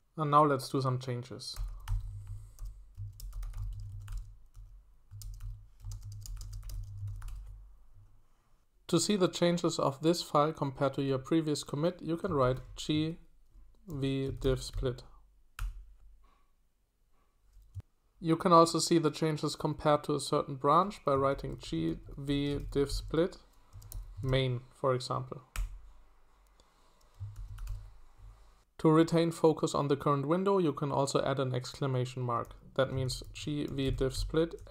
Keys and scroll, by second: 1.5-7.7 typing, 12.2-14.9 typing, 15.5 Return, 21.1-25.5 typing, 27.1-28.1 typing, 32.8-34.7 typing.